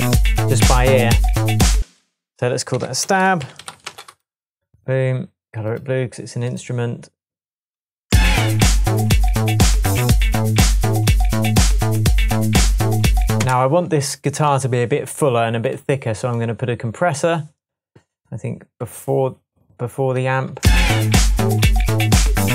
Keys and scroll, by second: 1.7-4.1 typing, 2.7 super+r, 8.0 space, 13.3 space, 20.6 space.